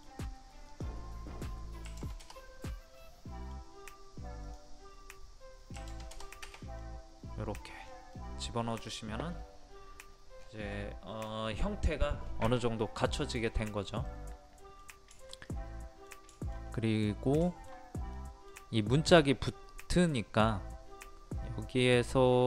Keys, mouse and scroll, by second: 0.7 click, 1.9 KP_5, 2.6 scroll down 1, 2.7 scroll up 1, 3.0-4.5 middle drag, 4.5-5.5 drag, 5.8 KP_5, 6.8 middle click, 7.6 scroll down 1, 8.2-10.1 middle drag, 10.1-10.7 scroll down 1, 10.7 middle click, 10.8-11.6 scroll down 1, 11.6-12.3 scroll up 1, 13.2 middle click, 13.5 scroll down 1, 14.1-16.9 middle drag, 16.9-17.4 scroll up 1, 17.5 shift+middle click, 18.0 scroll up 1, 18.2 middle click, 18.5 scroll down 1, 18.7 scroll up 1.